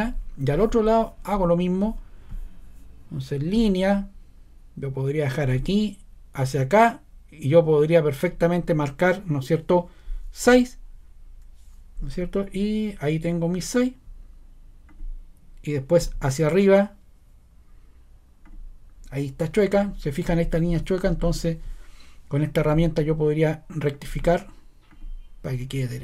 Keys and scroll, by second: 10.4 6.